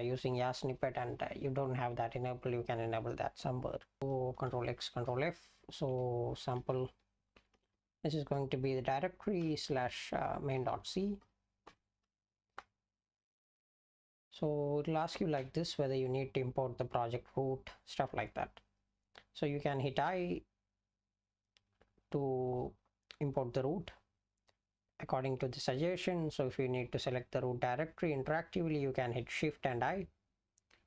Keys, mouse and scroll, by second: 4.0 Return, 12.6 Return.